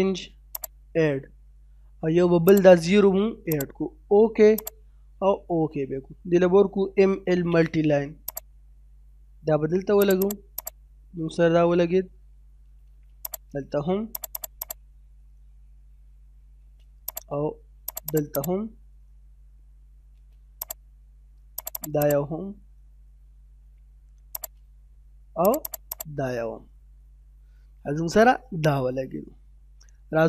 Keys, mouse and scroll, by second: 0.5 click, 5.4 middle click, 6.1-6.6 typing, 6.9-7.2 scroll up 1, 8.3 click, 10.3 right click, 10.6 click, 11.2 scroll down 1, 11.4 middle click, 11.8 scroll down 1, 12.4 scroll up 1, 13.2 click, 14.4 right click, 14.6 click, 14.9 scroll down 1, 15.2 middle click, 15.6-16.6 scroll up 2, 15.7 space, 17.1 click, 18.1 right click, 18.4 click, 18.7 scroll down 1, 18.9 middle click, 19.3 space, 19.3-19.7 scroll up 1, 20.6 click, 21.7 right click, 22.0 click, 22.3 scroll down 1, 22.6 middle click, 23.0-23.5 scroll up 1, 23.5 space, 24.4 click, 25.7 right click, 25.9 click, 26.3 scroll down 1, 26.6 middle click, 28.0-28.3 scroll down 1, 28.3 middle click.